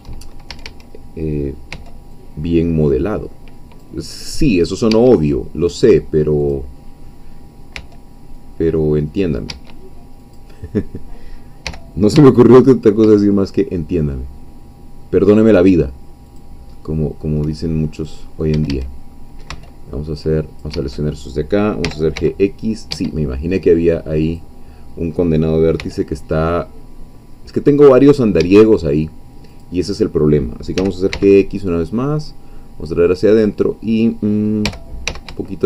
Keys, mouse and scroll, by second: 0.5 shift+a, 1.7 c, 2.1-4.0 drag, 4.3 middle click, 4.9 Escape, 6.4-7.7 drag, 7.7 c, 8.4-9.6 drag, 9.5 Escape, 10.2 click, 11.6 g, 12.2 x, 16.3 shift+click, 16.8 shift+middle click, 17.7 shift+scroll up 1, 18.5 a, 19.5 c, 20.2 click, 20.7 Escape, 21.8 g, 22.2 x, 22.9 Escape, 24.2 click, 25.8 c, 26.5-28.8 drag, 28.4 Escape, 29.5-30.8 drag, 30.8 g, 31.1 x, 33.3-34.6 drag, 34.6 g, 35.1 x.